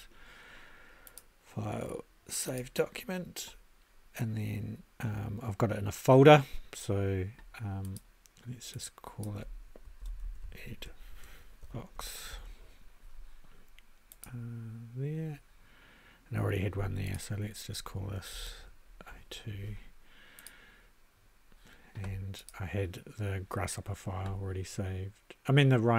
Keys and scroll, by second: 9.8-12.8 typing, 18.1-19.6 typing.